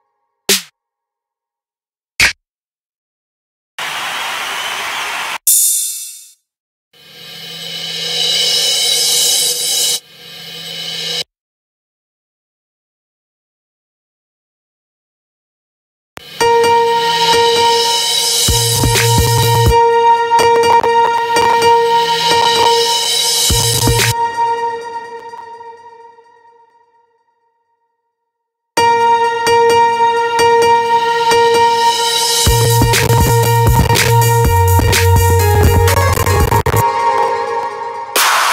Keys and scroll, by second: 15.5 space, 23.6 space, 28.2 space, 36.4 space.